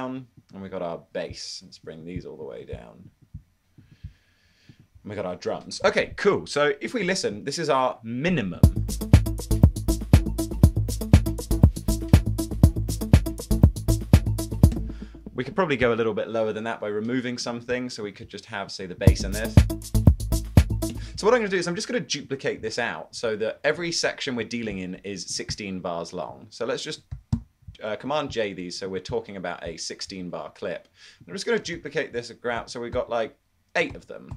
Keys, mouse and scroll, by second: 19.2 space, 21.6 space, 22.9 shift+super+d, 24.1 shift+super+d, 27.6 super+j, 31.8 super+d, 32.7 super+d, 34.1 super+d.